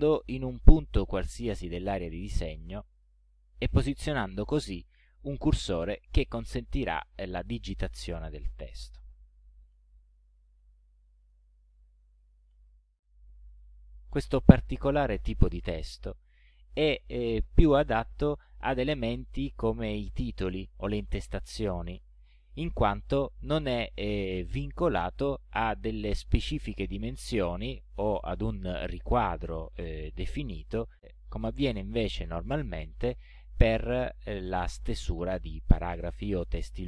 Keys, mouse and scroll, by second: 3.0 click, 4.4 ctrl+scroll up 2, 5.1 ctrl+scroll up 2, 5.9 ctrl+scroll down 2, 6.8 ctrl+scroll up 2, 9.2-13.0 typing.